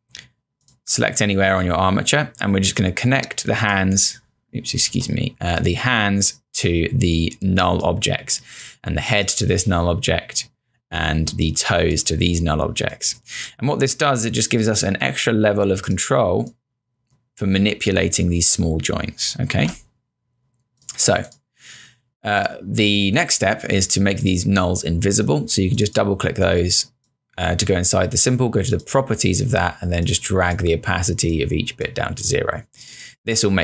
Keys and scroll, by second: 4.9 z, 19.6 z.